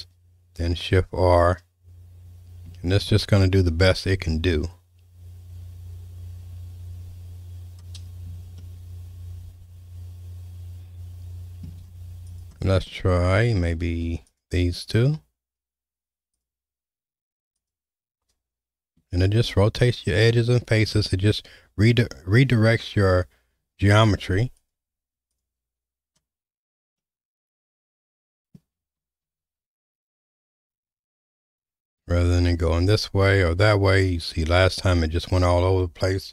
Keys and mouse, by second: 1.1 shift+r, 3.1 shift+r, 8.6-11.6 shift+middle drag, 12.3 click, 12.9 shift+middle click, 16.4-17.7 drag, 19.3 shift+r, 23.6 ctrl+r, 27.0-28.5 middle drag, 29.2 ctrl+z, 29.6 ctrl+z, 30.1 ctrl+z, 30.6 ctrl+z, 32.2 ctrl+r.